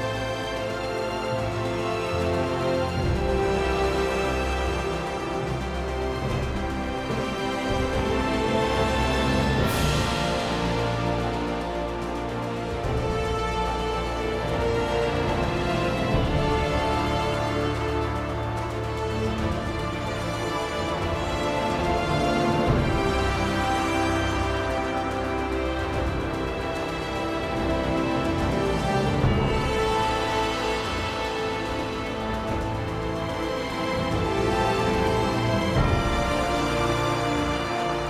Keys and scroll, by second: 2.7 s, 6.8 Page_Down, 8.0 p, 12.3 p, 37.6 p.